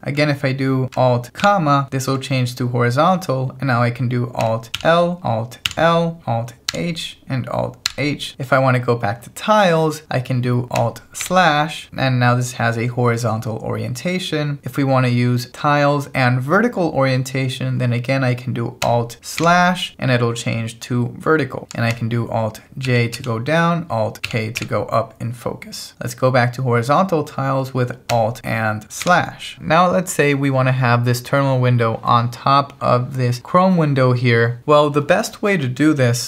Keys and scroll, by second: 1.4 alt+,, 4.8 alt+l, 6.7 alt+h, 11.3 alt+/, 11.9 alt+h, 19.4 alt+/, 22.9 alt+j, 24.3 alt+k, 29.0 alt+/.